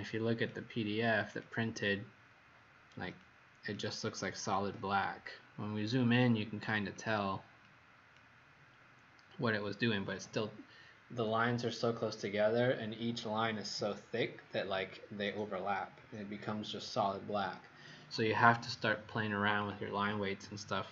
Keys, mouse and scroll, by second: 0.3 click, 3.1 click, 6.9 click, 7.6 click, 19.5 click.